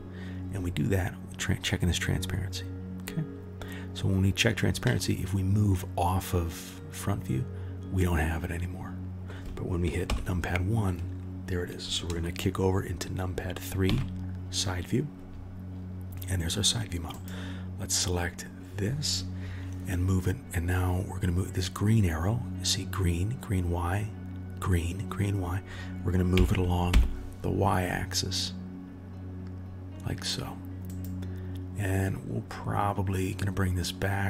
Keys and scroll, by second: 10.0 KP_1, 13.8 KP_3, 26.3 g.